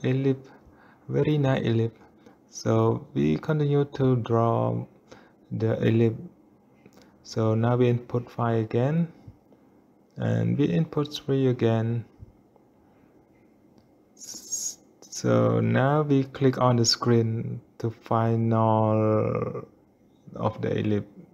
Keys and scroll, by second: 9.3 5, 13.1 Return, 13.8 3.